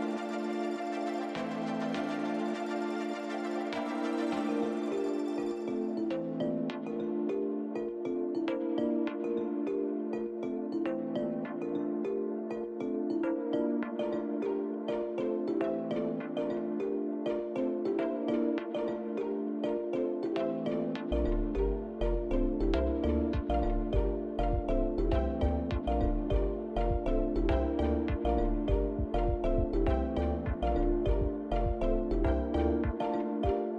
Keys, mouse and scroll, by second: 0.0 middle click, 0.0-1.1 scroll down 1, 1.9 shift+middle click, 5.2 scroll up 2, 7.4 shift+click, 10.4 ctrl+z, 11.7 shift+click, 12.5 shift+click, 13.4 shift+click, 14.7 shift+click, 19.2 shift+click, 21.2 ctrl+l, 23.5 click, 25.1 KP_Decimal, 26.5 Tab, 27.0 click, 28.0 l, 29.8 click, 30.6 click, 31.5 click, 32.9 l.